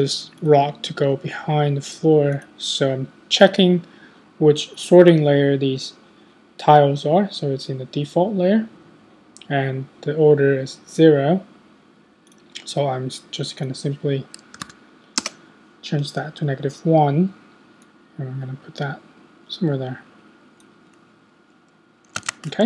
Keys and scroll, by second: 14.4-15.1 typing, 15.2 Return, 22.2 super+s.